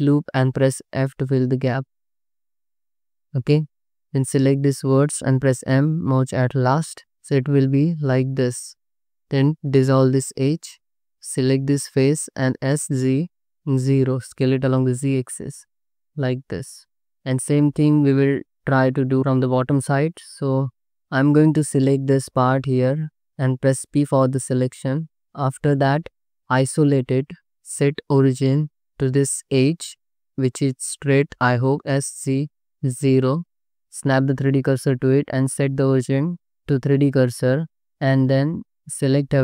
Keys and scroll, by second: 0.6 f, 3.4 1, 5.5 m, 8.7 2, 9.8 ctrl+x, 10.9 3, 12.5 s, 12.9 z, 13.8 0, 21.9 ctrl++, 23.8 p, 25.2 Tab, 26.3 /, 27.2 Tab, 31.8 s, 32.2 z, 33.3 0, 34.2 shift+s, 34.8 Tab, 38.2 Tab, 38.9 a.